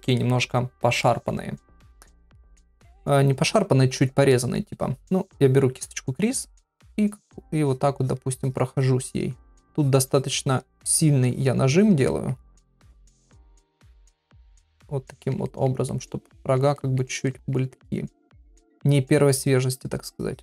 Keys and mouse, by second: 0.2 middle click, 1.0 shift+middle click, 2.3 ctrl+middle click, 4.3 middle click, 7.1 click, 7.5 click, 8.0 click, 8.3 click, 8.7 click, 9.0 click, 9.4 click, 9.7 click, 10.9 click, 11.3 click, 11.7 click, 12.1 middle click, 12.8 shift+click, 13.2 shift+click, 13.8 click, 14.2 click, 14.5 click, 14.8 click, 15.1 middle click, 15.5 ctrl+middle click, 15.9 middle click, 16.8 shift+middle click, 17.3 ctrl+middle click, 17.7 middle click, 18.4 ctrl+middle click, 20.1 click.